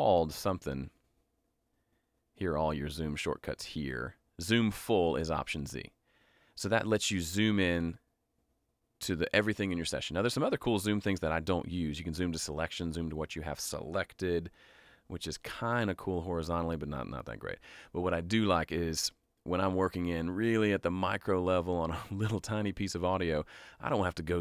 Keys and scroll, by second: 14.2 alt+s.